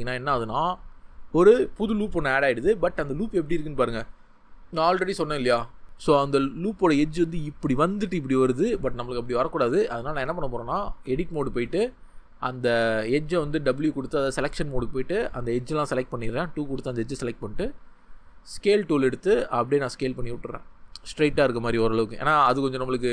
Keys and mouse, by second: 4.4-5.4 drag, 9.2 ctrl+z, 10.9 Tab, 13.7 w, 15.7 2.